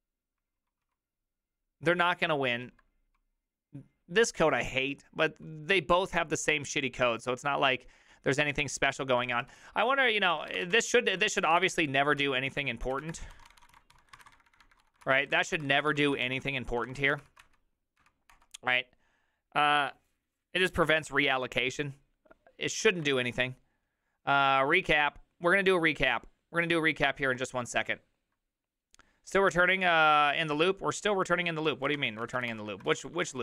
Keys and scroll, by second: 0.6 ctrl+u, 0.8 ctrl+u, 1.9 ctrl+u, 3.2 ctrl+u, 3.2-4.1 typing, 9.3 ctrl+u, 9.3-17.0 typing, 9.6 ctrl+u, 16.8 ctrl+a, 17.2 ctrl+c, 17.4 Up, 18.0 Up, 18.3 Return, 31.7-33.4 typing.